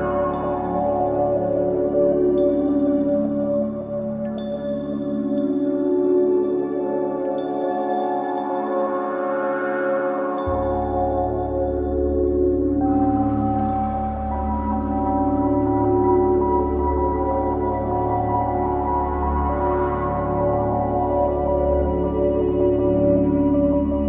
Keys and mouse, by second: 5.3 click, 6.8 x, 17.0 shift+a, 19.4 click, 20.1 click, 21.6-23.0 drag.